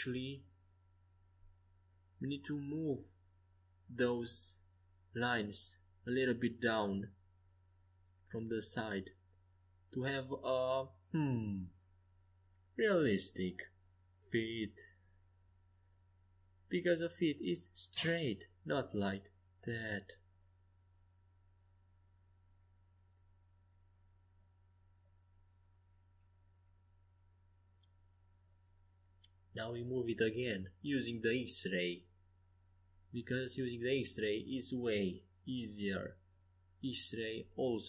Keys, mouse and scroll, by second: 0.2 ctrl+z, 3.8 KP_5, 4.1 KP_1, 4.7 KP_3, 8.7-13.7 drag, 9.2 a, 10.8 a, 11.1 a, 11.4 c, 13.8 g, 16.0 a, 18.1 c, 19.6 g, 22.8 a, 24.0 z, 25.5 ctrl+z, 25.9 ctrl+z, 26.3 ctrl+z, 26.7 ctrl+z, 27.4 a, 28.1 c, 29.7 g, 31.0 Escape, 31.3 a, 31.9 c, 34.6 g, 37.0 Escape.